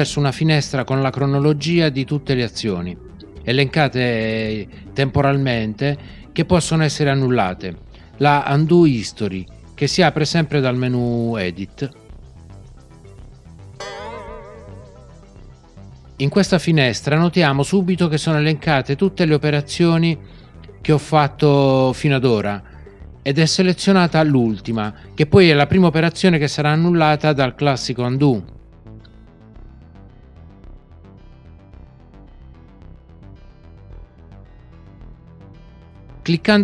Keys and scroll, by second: 13.8 alt+super+z.